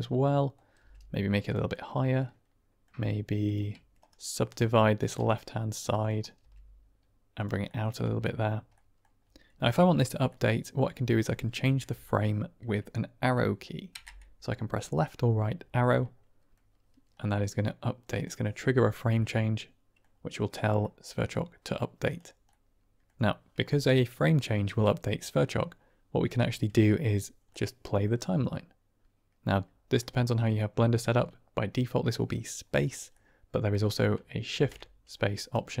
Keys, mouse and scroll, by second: 0.3 middle click, 0.7 g, 1.4 click, 1.6-2.7 middle drag, 3.4 shift+click, 3.9-4.4 right drag, 4.9 click, 5.3 middle click, 6.0 click, 6.3 g, 7.3 click, 7.6 middle click, 7.9 Tab, 8.6 middle drag, 10.2-10.7 drag, 13.9 Right, 15.8-16.3 drag, 16.3 middle click, 17.1-18.1 middle drag, 19.1-19.9 middle drag, 20.7-21.2 middle drag, 22.0 click, 22.4-23.0 middle drag, 27.5-27.9 middle drag, 29.9-30.7 middle drag, 33.1-33.9 middle drag, 34.4 shift+space, 35.1-35.8 drag.